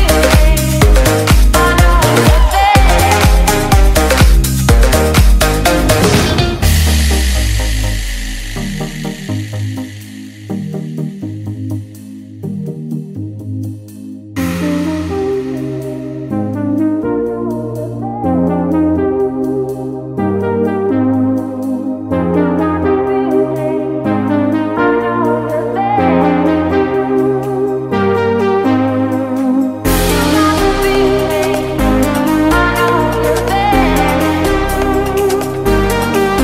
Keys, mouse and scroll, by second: 0.1 click, 0.7 Tab, 0.8 F10, 1.4 click, 2.2-4.4 typing, 5.1 click, 5.8-6.2 scroll down 1, 7.6-14.0 typing, 15.1 click, 21.1-22.0 typing, 23.9 click, 31.2 F10, 31.7 click, 34.3-36.4 typing.